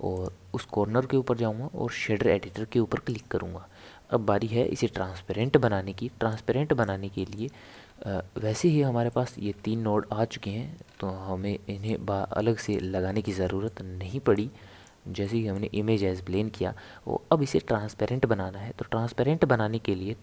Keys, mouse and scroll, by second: 4.6 n, 6.3 click, 7.1 middle click, 7.5 scroll up 2, 7.6 scroll down 1, 7.7 scroll up 2, 7.8 scroll down 1, 8.4 scroll up 1, 8.4 scroll down 1, 8.4 scroll up 4, 8.5-9.5 scroll down 2, 9.1 middle click, 9.5 scroll up 1, 9.5 scroll down 1, 9.6 scroll up 3, 9.9 scroll down 1, 9.9-10.9 scroll up 4, 10.9 scroll down 1, 10.9 scroll up 1, 11.9 click, 13.2-14.3 middle drag, 14.3 click, 15.2-18.9 middle drag.